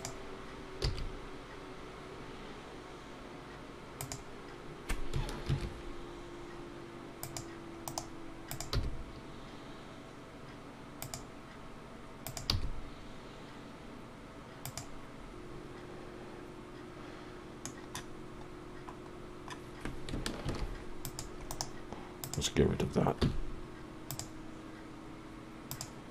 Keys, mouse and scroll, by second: 8.5 click, 11.0 g, 12.3 click, 14.6 g, 14.9 shift+middle click, 14.9 scroll down 1, 18.6-19.1 scroll up 2, 19.1-20.0 scroll down 1, 20.4 ctrl+r, 22.2 click, 23.2 x, 25.7 click.